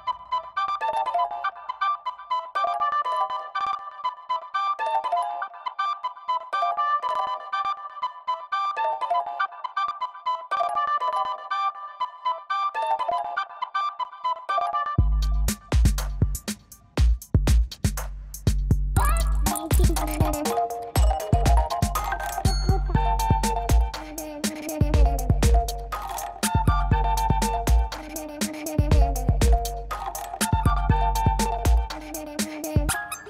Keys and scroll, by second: 1.5 [, 2.5 [, 2.8 ], 10.1 l, 10.7 ctrl+alt+d, 10.9 ctrl+j, 11.0 ctrl+t, 13.2 Return, 13.4-15.9 typing, 13.8 ctrl+e, 15.0 F9, 19.5 F9, 19.6 ], 22.4 [, 23.8 3, 27.9 ], 31.7 l, 32.5 ctrl+alt+d, 32.6 Return, 32.7 ctrl+j, 32.9 ctrl+t.